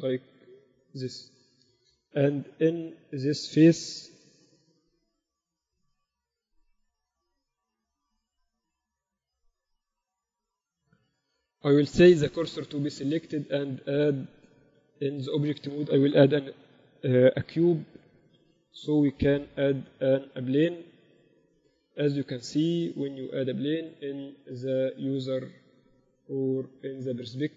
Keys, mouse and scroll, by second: 3.4-5.3 drag, 3.9-5.7 right drag, 5.7-9.9 typing, 11.9 shift+s, 14.1 shift+a, 15.3 Tab, 15.6 shift+a, 19.1 x, 19.5 shift+a, 23.3 KP_6, 23.7 KP_6.